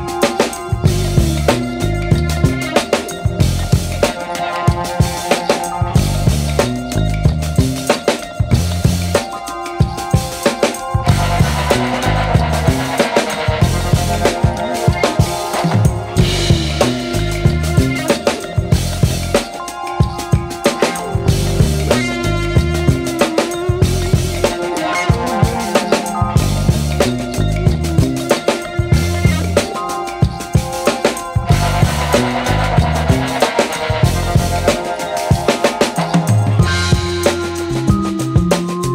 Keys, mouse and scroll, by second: 19.8 scroll down 1, 21.5 click, 22.6 scroll down 1, 24.5 click.